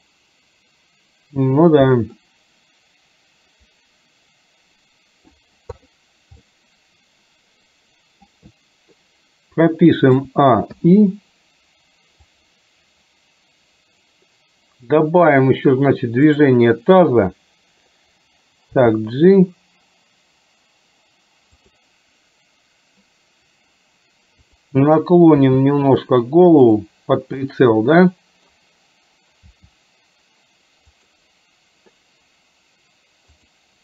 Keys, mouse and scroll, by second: 6.6-8.5 middle drag, 10.2 a, 10.8 i, 12.3-15.3 drag, 18.8 g, 25.5 r, 27.6-28.7 middle drag, 29.5 r.